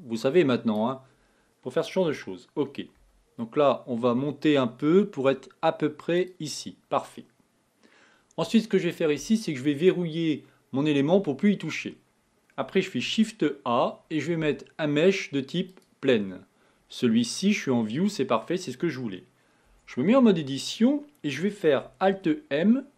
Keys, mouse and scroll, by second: 2.3 g, 9.8 click, 13.1 shift+a, 19.8 Tab, 22.1 alt+m.